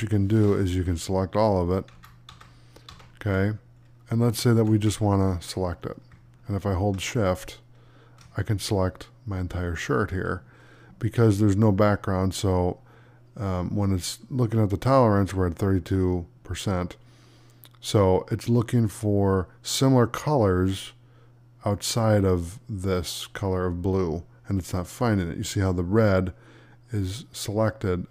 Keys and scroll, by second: 1.8 ctrl+z, 4.4 ctrl+d.